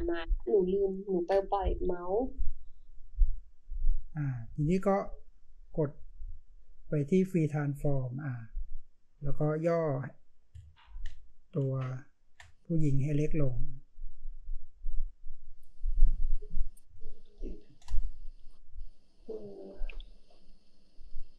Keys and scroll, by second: 10.8 ctrl+t, 11.7 ctrl+space, 12.2 ctrl+space, 16.8 ctrl+space.